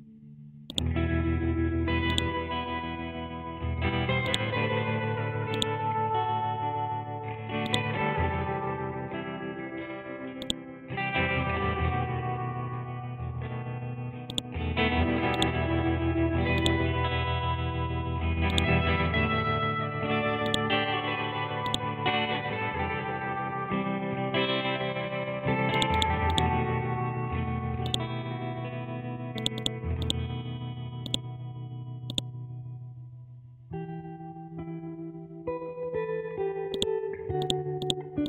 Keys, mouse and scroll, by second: 9.4-10.4 scroll up 1, 10.4-14.3 drag, 14.7 scroll down 1, 15.3-38.2 ctrl+drag.